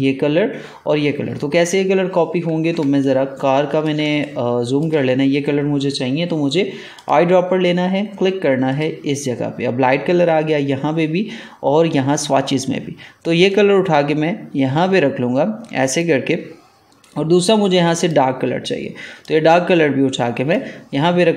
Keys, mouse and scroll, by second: 2.8 ctrl+space, 2.9 ctrl+click, 3.3 ctrl+space, 4.0 space, 4.1 click, 4.5 space, 6.9 click, 13.4-21.3 drag.